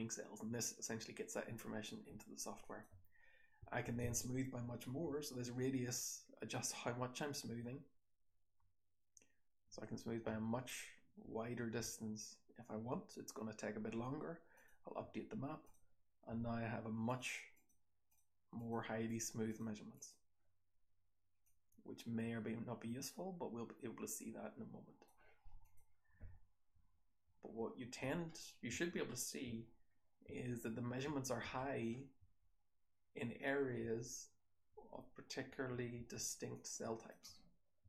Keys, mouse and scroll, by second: 1.7-2.5 scroll down 1, 25.5 click, 26.0-32.1 typing, 28.2-29.6 scroll up 4, 29.6-31.5 scroll down 6, 31.5-33.7 scroll up 4, 33.7-34.6 scroll up 1, 33.7 h, 34.6-35.2 scroll up 2, 34.6 h, 35.2-36.1 scroll down 3, 35.4 h, 35.9 h, 36.1-37.8 scroll up 3, 36.5-37.0 drag, 37.1 h, 37.7 h.